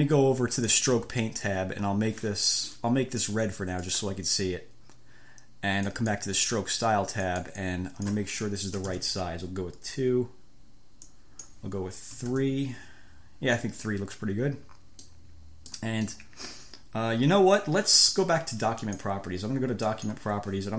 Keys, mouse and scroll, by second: 0.9 scroll up 1, 9.0 2, 9.1 Return, 11.3 click, 12.5 3, 12.8 Return, 14.1-15.5 drag, 16.1 click, 19.1 click, 20.2 click.